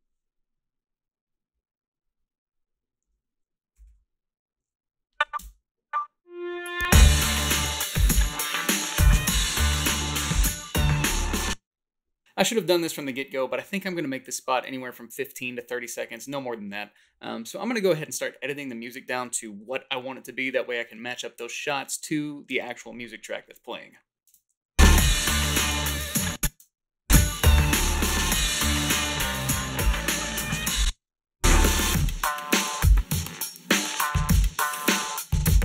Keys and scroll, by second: 0.0-0.2 typing, 3.9 ., 5.4 space, 11.2 space, 24.3 space, 26.1 space, 26.6 space, 30.9 space.